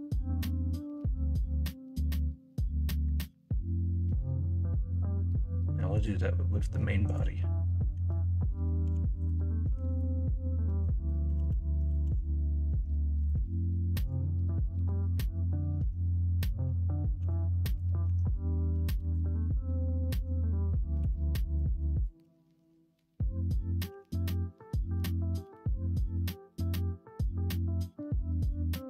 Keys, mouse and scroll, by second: 3.0-4.9 middle drag, 4.9 scroll down 1, 7.9 l, 8.8 h, 9.7 Tab, 10.8 middle drag, 11.3 ctrl+z, 11.9 ctrl+z, 15.7 Tab, 17.1 h, 18.0 Tab, 18.7 KP_1, 18.9 KP_3, 19.4 alt+z, 20.1 alt+z, 20.9 2, 23.9 e.